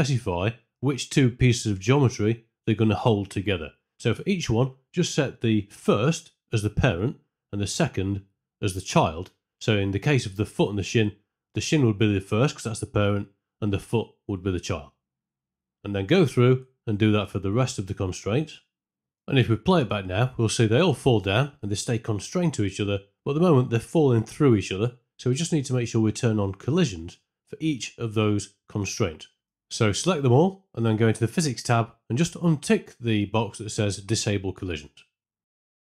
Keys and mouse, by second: 10.9 e, 12.9 e, 15.7 click, 15.9-19.0 typing, 17.7 click, 20.7 z, 21.3 space, 24.1 space, 25.6 shift+Left, 27.4 click, 28.4 shift+g, 31.9-32.9 drag, 33.3 alt+click, 35.7 space.